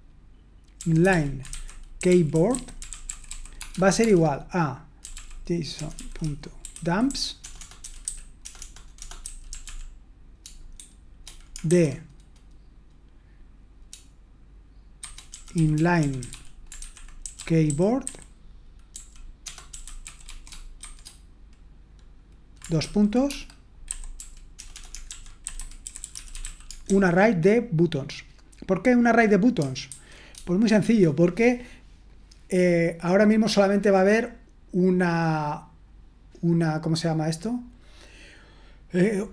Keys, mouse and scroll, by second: 1.9-11.7 typing, 15.4-20.8 typing, 24.2-27.3 typing.